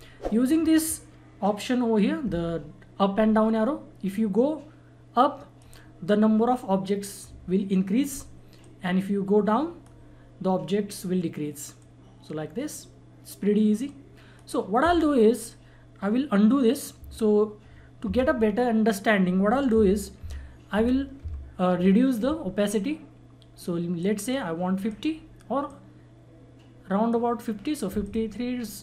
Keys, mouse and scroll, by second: 4.0-8.1 drag, 8.6-16.7 drag, 18.0 ctrl+z, 19.7 ctrl+z, 23.9-28.0 drag.